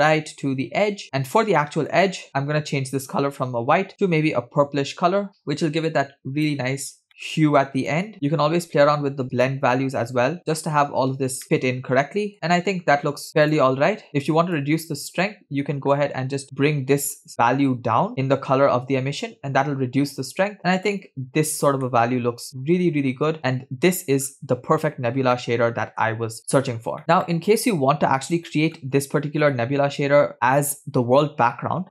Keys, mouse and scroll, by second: 2.0 middle click, 2.3-3.0 scroll up 3, 3.0 click, 7.1 middle drag, 7.1 scroll up 2, 7.9 click, 8.1 middle click, 9.4-10.8 shift+drag, 11.4-12.5 middle drag, 13.5 middle click, 13.5 scroll down 3, 13.5 click, 22.2-24.3 middle drag, 24.9-25.7 scroll up 1, 25.8-26.4 shift+middle drag, 26.5-26.9 scroll down 1, 27.2 scroll down 1, 27.6-29.0 middle drag, 30.3 scroll down 1, 30.6-30.9 middle drag.